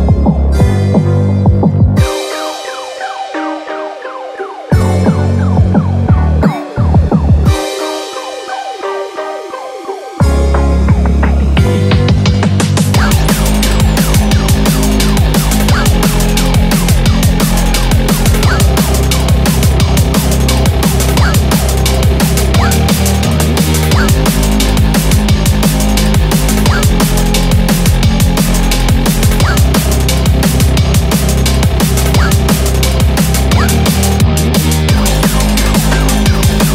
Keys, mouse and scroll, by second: 14.5 s, 16.4 click, 16.4 s, 16.9 g, 18.0 click, 18.0-22.9 typing, 18.9 click, 19.5 click, 19.6 click, 20.3 click, 20.4 click, 21.1 click, 21.2 click, 21.8 click, 22.6 click, 23.9 click, 24.3 g, 26.3 shift+middle click, 26.3 alt+click, 26.3 scroll up 4, 27.1 alt+click, 28.1 alt+click, 29.1 alt+shift+click, 30.2 alt+shift+click, 30.7 click, 30.8 click, 31.3 alt+shift+click, 31.6 middle click, 32.1-33.2 scroll down 17, 33.4 shift+middle click, 33.6-34.0 scroll up 5, 33.9 middle click, 34.3-34.7 scroll down 3, 34.7 shift+middle click, 34.9-35.3 scroll up 9, 35.4 middle click, 35.7 scroll down 2, 36.1 shift+middle click, 36.5-36.7 scroll up 4.